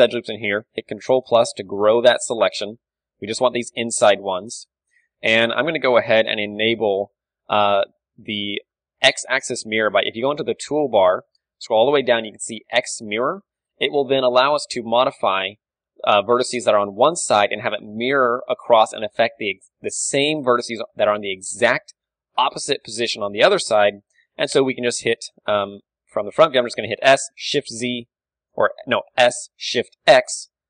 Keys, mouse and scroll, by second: 0.9 ctrl+KP_Add, 1.0 ctrl+KP_Add, 1.8 ctrl+KP_Add, 1.9 ctrl+KP_Subtract, 2.3 ctrl+KP_Subtract, 3.7 right click, 4.3-7.4 middle drag, 4.8 z, 7.4 t, 8.5-9.8 middle drag, 9.8-11.5 drag, 11.5-13.3 middle drag, 13.3-15.3 drag, 13.8 z, 14.2 s, 15.3-18.1 middle drag, 18.1-20.3 drag, 18.4 z, 20.1 z, 20.1 KP_3, 20.3-22.9 middle drag, 23.0 z, 23.2-28.1 middle drag, 23.9 z, 25.1 KP_1, 25.4 z, 27.1 s, 28.9-30.6 drag, 29.3 s.